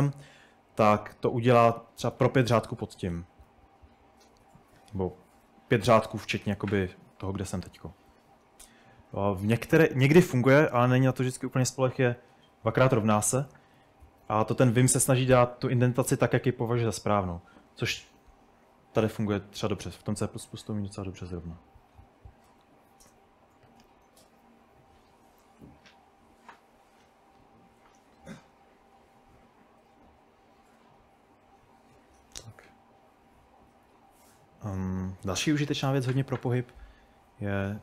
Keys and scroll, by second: 2.2-3.2 typing, 6.9 typing, 8.3-8.7 typing, 9.9-10.8 typing, 12.4 typing, 13.8-15.4 typing, 16.7 typing, 22.5-23.4 typing, 29.2-29.9 typing, 33.5-37.8 typing.